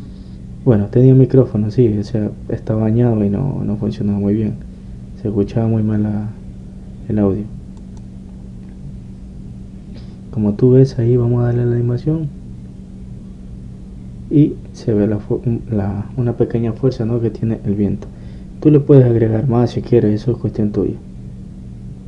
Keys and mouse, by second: 8.9-10.8 drag, 16.1 middle click.